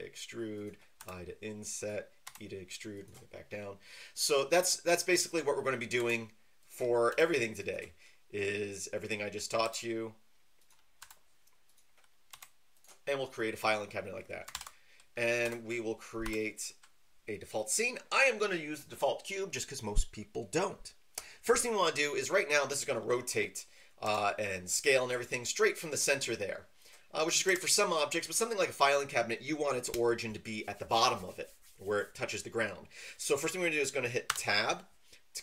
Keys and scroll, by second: 2.2 e, 6.0 e, 7.1 typing, 9.6 e, 11.0 i, 12.3 e, 14.5 ctrl+n, 15.4 Return, 16.2 d, 24.0 r, 27.5 Escape, 34.3 Tab.